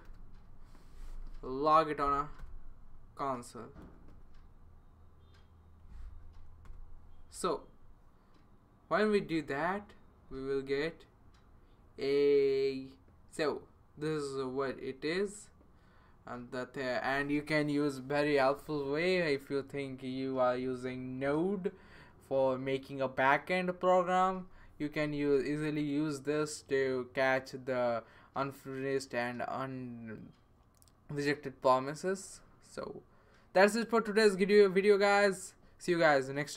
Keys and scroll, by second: 0.1 {, 2.0 |, 2.4 Return, 3.6-4.8 typing, 6.3 Down, 6.6 Return.